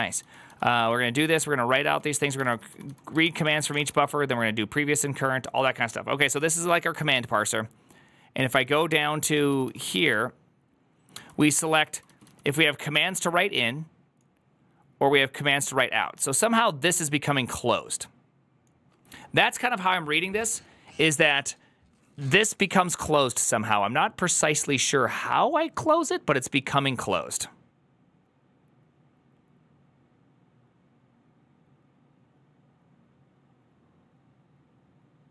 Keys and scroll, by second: 1.0-14.3 typing.